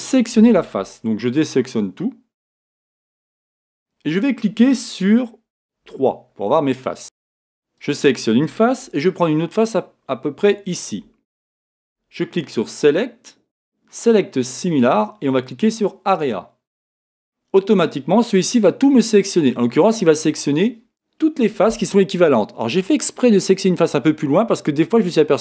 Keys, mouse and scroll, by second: 2.4 a, 5.9 3, 7.0 a, 10.6 shift+click, 16.3 click, 17.3-25.4 middle drag.